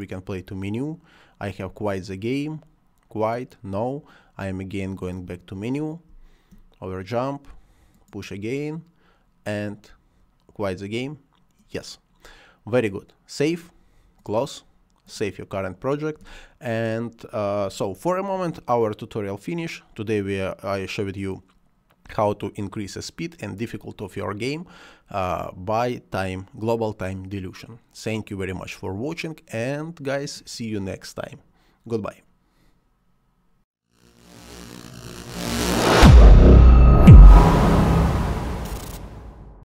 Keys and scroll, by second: 5.9 space.